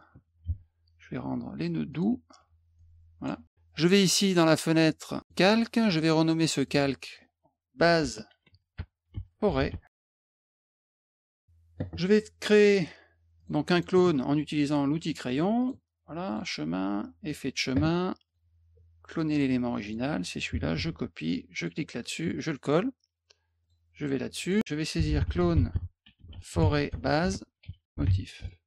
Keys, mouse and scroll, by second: 0.1 F2, 0.5 a, 1.9 click, 2.7 click, 5.2 click, 6.5 click, 6.6 click, 7.7-10.6 typing, 12.6 click, 13.4 click, 13.7 click, 15.6 click, 16.3 click, 17.3 click, 18.2 click, 19.3 click, 19.8 click, 20.8 ctrl+c, 21.5 click, 22.6 click, 23.6 click, 24.4 click, 24.5 click, 24.7-28.5 typing.